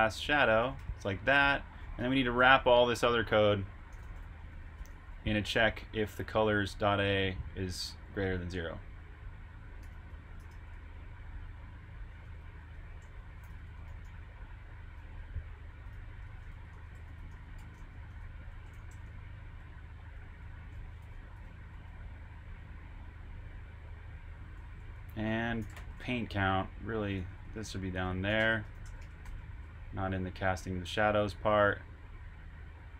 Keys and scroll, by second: 7.9-8.7 typing, 12.2-16.8 typing, 18.0-19.4 typing, 31.6-32.5 typing.